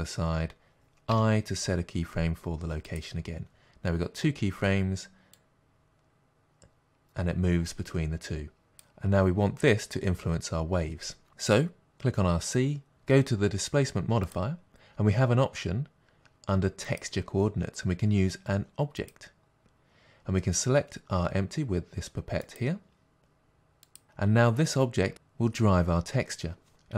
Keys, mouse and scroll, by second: 5.3-11.8 drag, 12.9-23.9 drag.